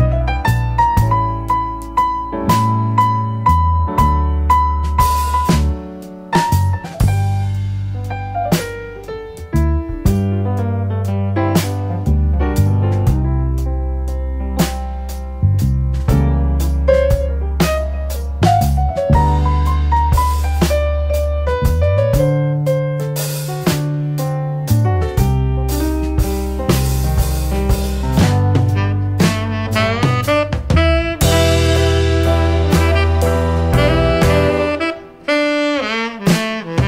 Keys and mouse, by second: 0.6-3.9 drag, 4.8-6.0 drag, 7.6-10.2 drag, 10.9-11.5 drag, 13.4 KP_5, 14.4-14.9 middle drag, 18.1-19.9 drag, 20.6 click, 21.2-22.6 drag, 23.8 middle click, 25.0 click, 25.4 KP_0, 27.7-29.0 drag, 29.5-30.7 drag, 31.3-34.8 drag, 36.3-36.8 drag.